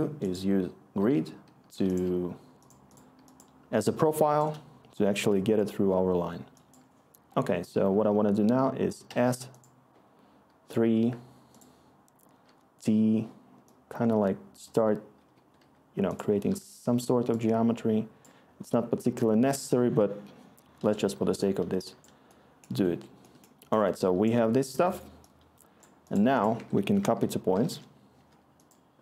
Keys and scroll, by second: 1.7-2.7 typing, 4.2-4.7 scroll, 7.8 s, 9.0 3, 12.4 t, 14.9-16.4 typing, 26.5 Tab, 26.6-28.0 typing, 28.1 Return.